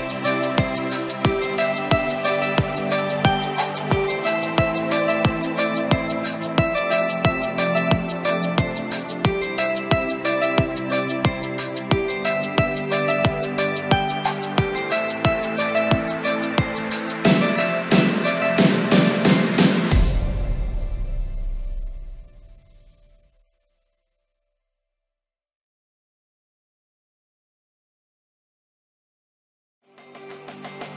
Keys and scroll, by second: 12.0 ctrl+d, 29.7 shift+F5.